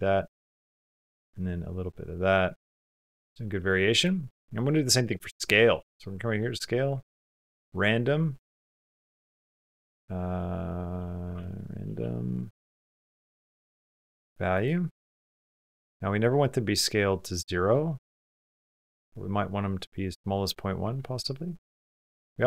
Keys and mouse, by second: 0.5-2.5 drag, 2.8 middle click, 3.7 middle click, 4.4 middle click, 4.6 click, 5.4 click, 6.1 click, 6.6-10.1 drag, 14.9 click, 14.9 typing, 16.0-17.4 drag, 17.4 middle click, 20.2 middle click, 20.9 shift+middle click, 21.1 middle click, 21.6 middle click, 22.1 middle click.